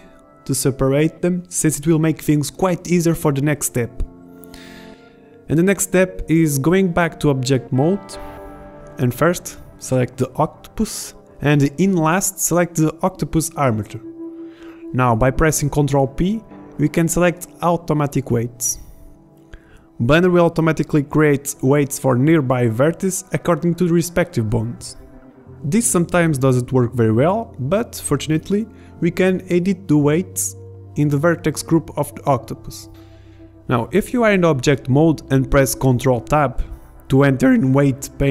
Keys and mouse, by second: 1.3 click, 1.6-3.7 drag, 3.7 Tab, 4.2 Tab, 9.7 middle click, 9.8-10.7 middle drag, 13.8 ctrl+p, 28.9 Tab, 30.4 BackSpace, 30.5 BackSpace, 32.1 Tab, 34.4 ctrl+Tab, 37.8 middle click.